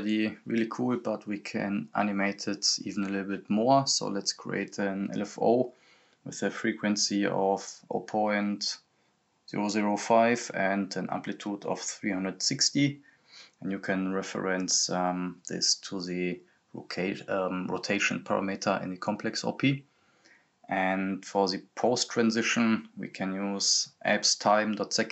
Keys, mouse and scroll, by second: 0.0 click, 6.8 click, 7.8 ., 10.1 click, 11.3-12.0 scroll up 1, 12.0 click, 15.9 click, 17.4-19.7 typing, 21.0-22.8 typing, 23.7-24.0 scroll up 1, 24.4-25.1 drag.